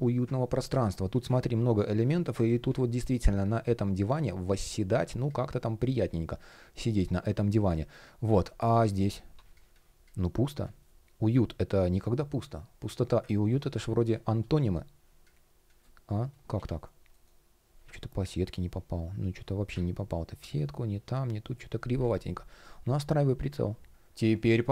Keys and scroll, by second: 2.7 shift+p, 16.3 shift+o, 16.8 shift+g.